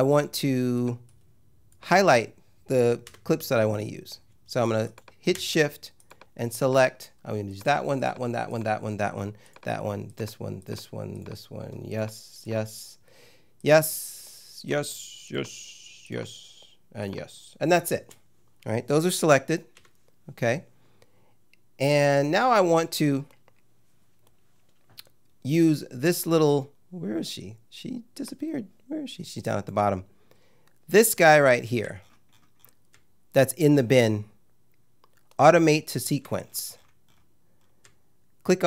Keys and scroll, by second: 3.1 `, 19.7 `.